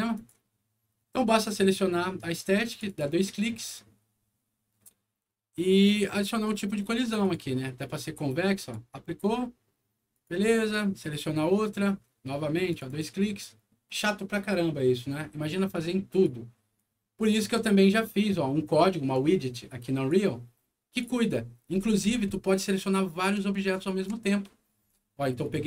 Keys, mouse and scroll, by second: 0.1 click, 2.6 click, 2.8 click, 6.1 click, 7.1 click, 8.5 click, 10.1 click, 10.9 click, 12.6 click, 12.8 click, 16.0 click, 16.7 right click, 19.1 click, 20.8 click, 21.3-22.4 scroll down 4, 23.6 ctrl+click, 24.7 ctrl+scroll up 1, 25.3 ctrl+click.